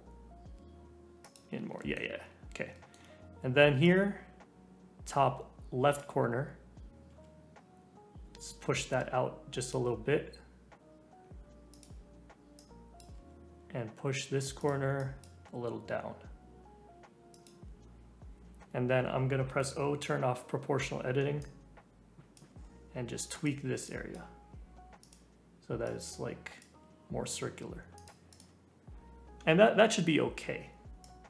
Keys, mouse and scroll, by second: 1.7 shift+middle click, 2.2-2.7 scroll down 1, 2.7-3.8 shift+middle drag, 3.8 click, 7.1 g, 12.5 click, 13.1 g, 15.0 click, 15.3 g, 19.7 o, 21.4 click, 22.5 g, 23.8 click, 24.2 g, 25.8 click, 26.7 g, 28.3 click, 28.8-29.3 scroll down 1, 29.3-31.0 scroll up 1, 31.0 click.